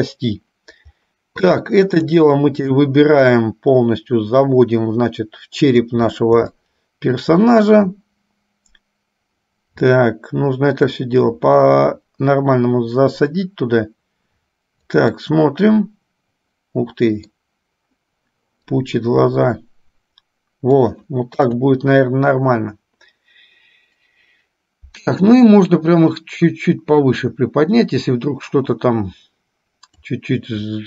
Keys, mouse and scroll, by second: 1.7 click, 3.4-6.2 drag, 6.7 shift+middle click, 11.0-15.4 drag, 15.5-17.6 middle drag, 18.9-21.2 drag, 21.5 KP_1, 25.2 click, 26.1-30.6 drag.